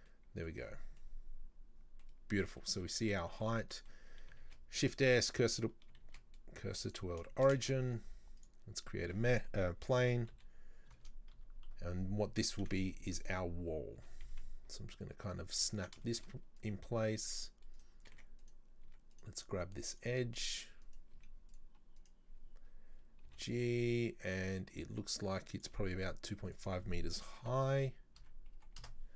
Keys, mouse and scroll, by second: 0.1-0.5 middle drag, 0.5-1.0 scroll down 4, 1.0-2.1 middle drag, 2.1 scroll down 1, 2.2-2.6 scroll up 4, 2.6 middle drag, 2.9 scroll down 1, 3.2-4.5 middle drag, 4.5 shift+s, 6.1 shift+s, 7.3 shift+middle click, 7.7 shift+a, 8.8 scroll up 1, 9.1 Tab, 10.0 r, 11.7 KP_3, 13.4-14.0 scroll up 3, 14.0 g, 16.1 shift+middle click, 16.6 right click, 17.3 right click, 17.8 right click, 18.2 Tab, 18.4 right click, 18.9 Tab, 19.1 right click, 20.0 click, 20.5 right click, 20.9 right click, 21.2 z, 22.0 right click, 23.3 g, 26.5-29.1 drag.